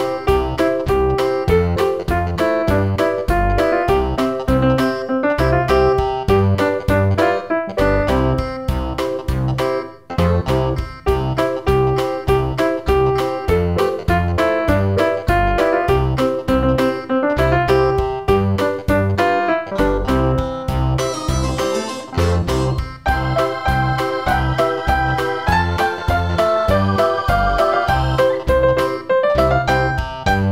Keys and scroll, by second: 5.6 super+c, 5.8 super+v.